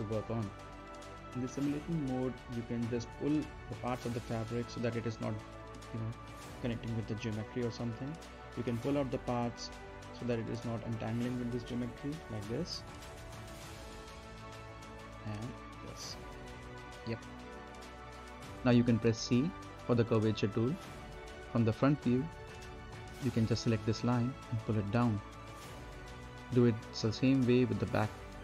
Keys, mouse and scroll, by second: 0.7-2.5 right drag, 2.5 middle click, 2.8 right click, 3.4-5.8 drag, 5.8 right click, 6.8 middle click, 7.0-7.5 scroll up 1, 7.5 right click, 8.0 middle click, 8.3-8.8 scroll down 1, 8.8 middle click, 9.8 click, 10.6 right click, 11.6 click, 12.8 space, 13.0 click, 13.3 scroll up 1, 13.6 right click, 14.0 scroll down 1, 14.2 middle click, 14.5 scroll up 2, 14.7 q, 15.5-17.3 middle drag, 17.3-18.1 scroll down 2, 17.4 z, 18.1 middle click, 19.5 click, 21.3 middle click, 21.9-22.4 scroll down 1, 22.4-23.9 middle drag, 23.9-27.1 drag, 27.1-27.7 scroll up 1, 27.7 middle click, 28.0-28.3 scroll down 1, 28.3 middle click.